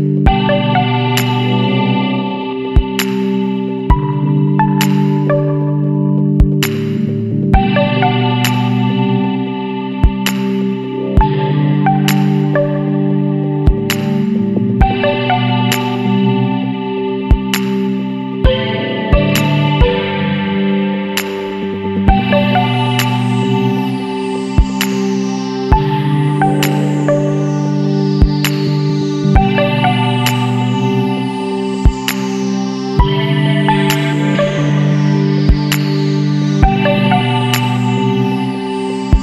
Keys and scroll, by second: 1.8-3.3 typing, 10.1-11.1 typing, 19.1 F6, 23.9 shift+Page_Down, 26.5 ctrl+space, 29.6 F12, 31.7 2, 37.6 w.